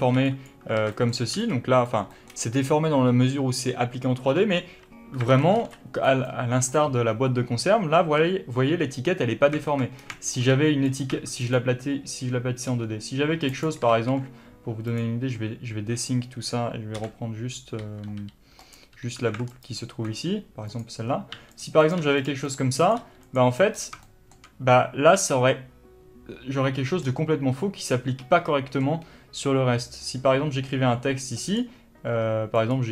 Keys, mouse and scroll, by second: 0.2 b, 1.4-11.0 middle drag, 1.4 b, 5.2 scroll up 1, 5.4 alt+a, 10.0 scroll down 1, 10.6 g, 11.2 1, 11.5 click, 12.7 g, 13.7 click, 14.0 ctrl+z, 14.9 click, 17.0 l, 18.7 click, 19.0 3, 19.6 alt+click, 20.7 click, 21.4 g, 21.9 click, 22.0 g, 22.5 click, 22.9 click, 23.0 g, 23.8 scroll up 1, 24.1-31.5 shift+middle drag, 27.1-28.1 scroll down 1, 31.1 d, 31.5-32.9 drag, 31.6 d, 32.8-32.9 typing.